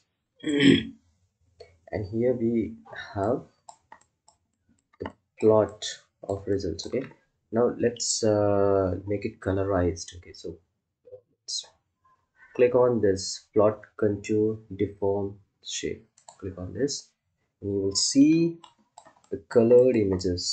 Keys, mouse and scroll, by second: 2.8 click, 3.5 ctrl+alt+click, 6.8 ctrl+alt+click, 16.1-20.5 drag.